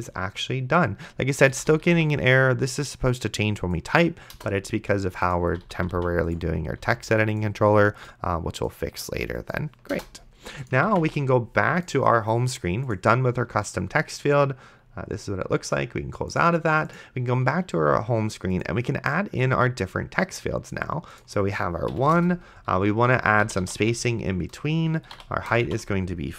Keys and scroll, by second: 0.1 ctrl+s, 1.6 d, 4.3 BackSpace, 5.5 d, 7.1 ctrl+s, 9.9 BackSpace, 11.2 ctrl+s, 22.2 Return, 23.1-26.2 typing, 24.6 Return.